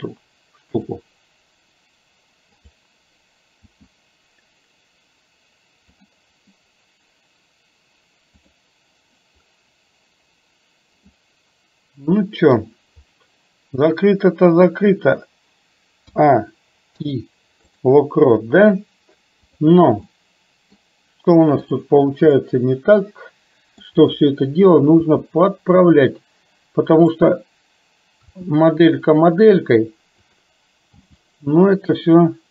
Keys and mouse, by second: 3.7 r, 11.1-12.6 middle drag, 16.1 a, 17.0 i, 19.5 click, 20.2 middle click, 21.8 click, 22.5-24.0 middle drag, 25.1 g, 28.4 r, 31.0 g.